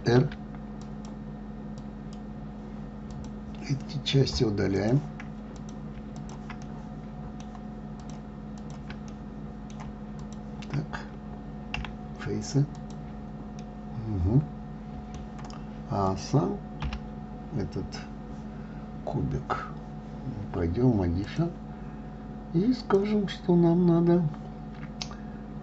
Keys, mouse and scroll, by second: 0.3 ctrl+r, 3.5 click, 5.1 click, 5.9 click, 6.5 shift+click, 7.0-8.4 middle drag, 8.4 shift+click, 8.9 shift+click, 9.5-10.6 middle drag, 10.6 shift+click, 12.1 Delete, 14.0-16.4 middle drag, 16.4 click, 17.2 l, 21.6 click, 23.2-25.6 drag.